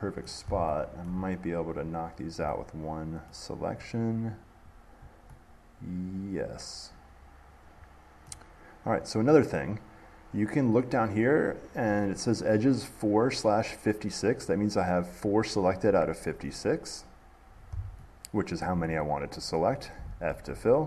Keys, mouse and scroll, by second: 0.5 middle click, 1.3 middle click, 2.0 middle click, 2.4 scroll down 2, 2.7 middle click, 4.9 click, 8.5-11.3 middle drag, 17.9 middle click, 19.6 middle click, 19.7 middle click.